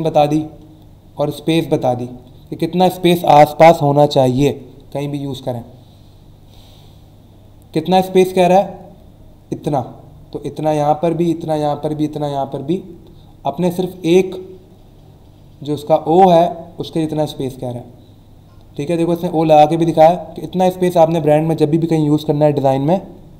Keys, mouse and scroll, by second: 5.2 scroll down 1, 6.0 scroll down 1, 17.2-18.2 scroll down 3.